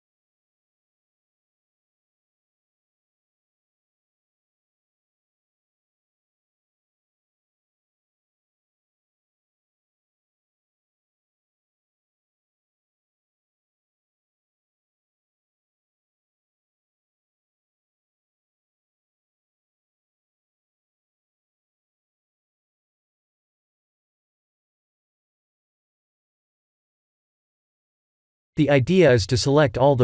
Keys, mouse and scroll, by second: 0.9 g, 3.1 shift+d, 5.1 KP_1, 5.6-6.7 scroll down 3, 6.7 g, 9.9 s, 12.8 middle click, 13.6-15.1 scroll up 1, 15.1 click, 16.9 KP_3, 17.7-18.0 scroll up 5, 19.0 shift+z, 19.6 shift+middle click, 20.4-20.9 scroll up 2, 20.9 middle click, 21.8 KP_1, 22.9 shift+middle click, 23.8 scroll up 1, 24.9 g.